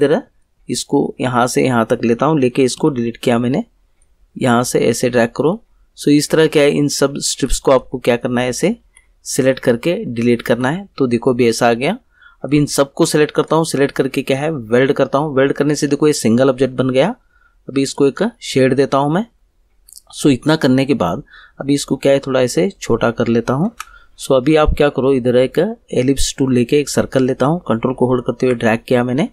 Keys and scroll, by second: 2.7 Delete, 5.4 Delete, 7.3 Delete, 8.8 Delete, 10.4 Delete.